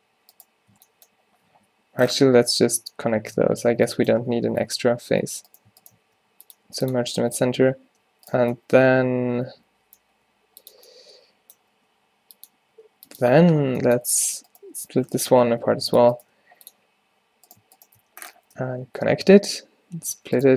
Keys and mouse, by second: 0.8 b, 1.8 z, 3.8 ctrl+z, 4.3 ctrl+z, 4.5 ctrl+z, 4.8 ctrl+z, 5.2 ctrl+z, 6.1 w, 7.7 a, 10.4 g, 11.8 g, 12.8 g, 14.3-15.6 drag, 15.6 v, 18.6 f, 20.2 alt+w.